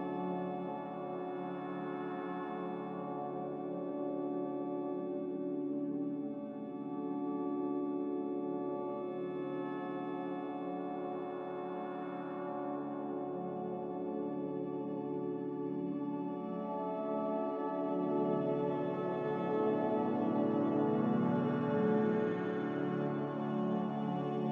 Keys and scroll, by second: 3.2 typing, 5.0-5.7 typing.